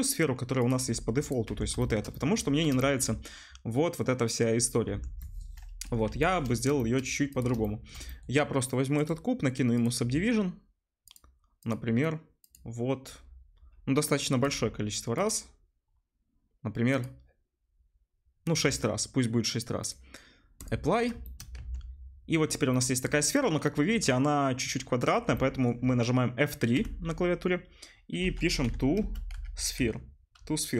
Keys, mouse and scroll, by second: 0.9 g, 1.4 Tab, 3.0-4.5 middle drag, 4.8 Tab, 6.0 Delete, 6.9 middle click, 7.3 click, 7.4-9.0 shift+middle drag, 9.0-30.7 drag, 21.6 Tab, 26.8 F3.